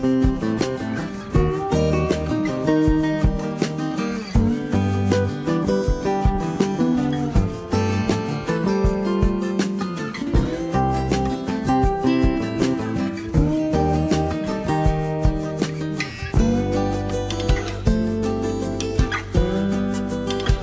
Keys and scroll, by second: 11.4 ctrl+z.